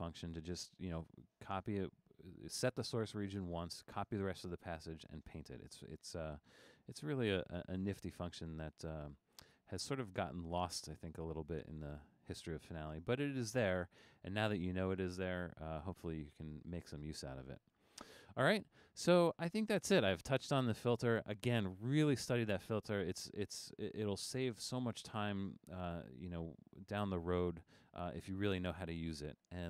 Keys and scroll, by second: 6.9 super+f.